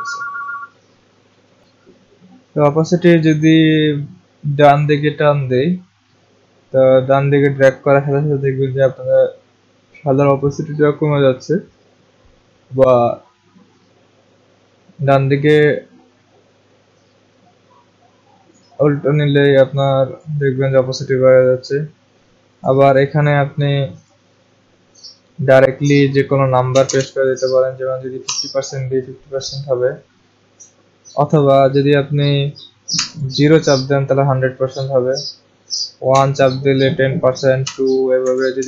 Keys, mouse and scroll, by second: 1.5 click, 1.7 click, 20.2 click, 22.7 click, 24.1 click, 26.5-27.3 typing, 28.2 Return, 32.9 typing, 35.8-38.6 typing.